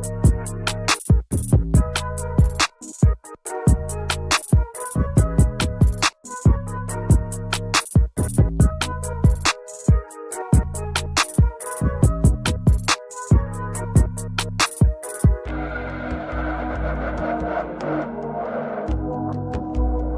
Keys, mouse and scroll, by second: 1.4 double click, 4.0 double click, 7.4 double click, 11.7 double click, 14.6 alt+scroll up 1, 20.0-20.1 alt+scroll down 1.